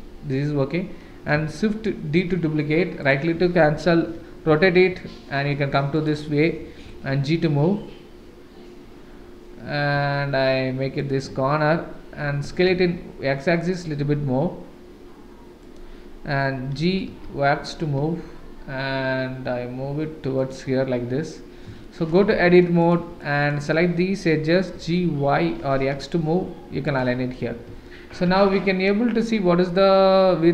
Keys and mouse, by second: 2.1 shift+d, 4.0 r, 6.8 g, 12.4 s, 16.7 g, 21.8-22.3 shift+middle drag, 22.3 Tab, 22.8 click, 23.3 click, 24.7 g, 27.8 shift+right click, 28.2 Tab.